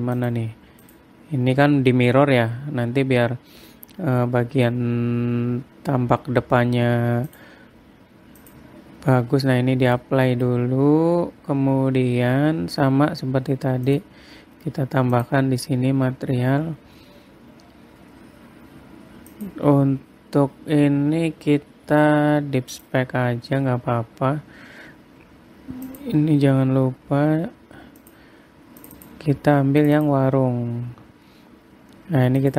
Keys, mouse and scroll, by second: 0.7 click, 5.8-6.5 scroll up 2, 7.8 click, 10.0 middle click, 10.8 middle click, 12.0-12.3 scroll up 1, 12.3 scroll down 1, 13.4-13.8 scroll down 3, 14.4 click, 15.7 click, 16.8-18.7 scroll down 23, 19.8 click, 25.0-26.4 scroll up 4, 26.4 click, 27.1-28.0 scroll down 9, 28.5 click.